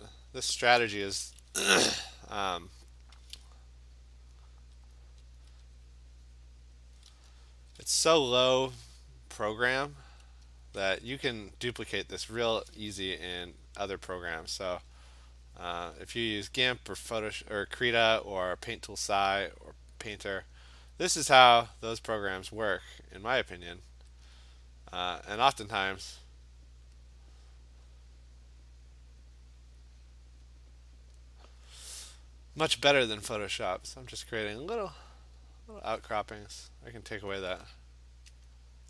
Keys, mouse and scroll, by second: 0.1 click, 0.9 alt+click, 1.1 [, 1.3 [, 1.4 [, 1.6 [, 2.4 click, 3.3 click, 4.4 alt+click, 4.5 alt+click, 5.0 click, 5.4 click, 6.7 click, 7.0 click, 9.6 click, 9.9 click, 10.1 click, 10.4 click, 10.5 alt+click, 10.7 click, 12.0 click, 12.2 click, 12.5 click, 14.2 click, 14.7 alt+click, 15.9 click, 16.8 alt+click, 17.5 click, 17.7 click, 18.6 alt+click, 20.9 alt+click, 21.3 click, 22.0 click, 22.2 click, 22.6 click, 22.7 alt+click, 23.7 click, 24.3 alt+click, 25.2 click, 26.9 click, 27.5 click, 27.9 click, 28.7 alt+click, 29.3 click, 29.4 click, 30.5 click, 31.2 click, 32.8 click, 33.1 click, 33.3 click, 33.6 click, 34.1 click, 34.8 click, 37.4 click, 38.5 click.